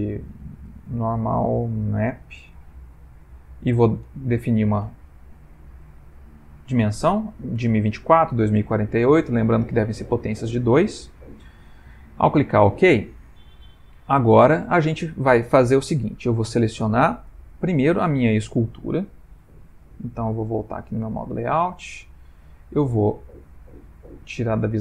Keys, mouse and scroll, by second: 20.6 click, 21.6 /, 22.4 middle click, 24.7 /.